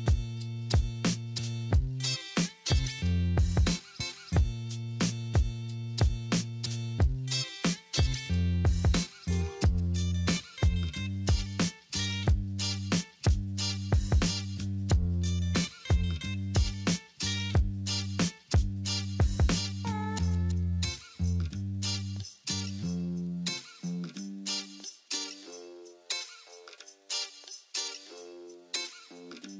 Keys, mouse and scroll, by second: 12.4 double click, 13.8 double click.